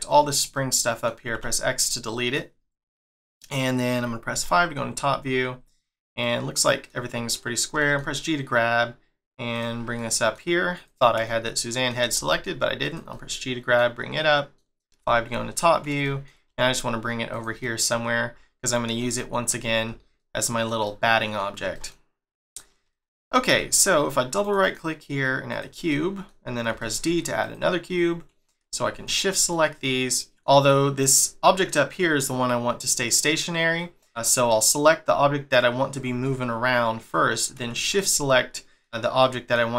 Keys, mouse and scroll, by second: 1.3 x, 1.9 middle click, 2.6-3.1 scroll down 1, 3.1 shift+middle click, 4.3 5, 4.8-5.3 scroll down 7, 5.4 scroll up 3, 6.2 middle click, 7.1-7.7 scroll up 1, 7.7 g, 9.8 scroll up 1, 10.0 middle click, 10.8 click, 11.3 shift+middle click, 12.2 g, 13.1 middle click, 14.1 middle click, 15.0 5, 15.7 scroll down 4, 16.0 shift+middle click, 16.5 g, 17.6 middle click, 18.0 scroll up 1, 19.2 alt+middle click, 19.6 scroll down 1, 20.2 shift+middle click, 21.6 g, 23.6 shift+middle click, 24.4 right click, 24.6 right click, 25.9 middle click, 26.7 d, 27.7 scroll up 2, 29.1 shift+click, 29.5 middle click, 32.9 middle click, 33.8 middle click, 34.3 click, 37.8 shift+click, 38.3 middle click, 39.2 middle click.